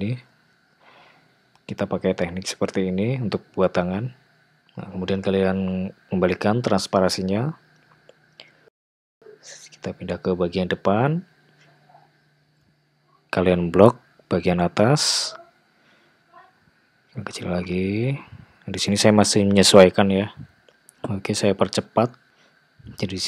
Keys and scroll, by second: 5.8 alt+z, 11.6 `, 12.7 alt+z, 18.0 ctrl+a, 22.0 `, 22.4 g.